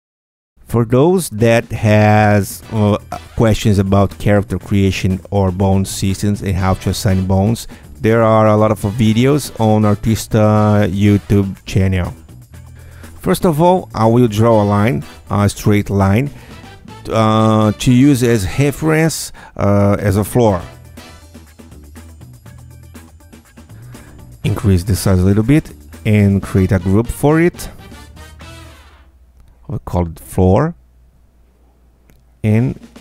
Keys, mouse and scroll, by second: 2.4 ctrl+alt+z, 14.5 Tab, 14.7-15.2 scroll down 4, 20.8 click, 23.7 ctrl+click, 24.3 ctrl+Tab, 24.4 ctrl+click, 25.4 KP_Add, 26.0 Tab, 27.2 Tab, 28.3 ctrl+f, 29.7 ctrl+f, 30.7-32.6 typing.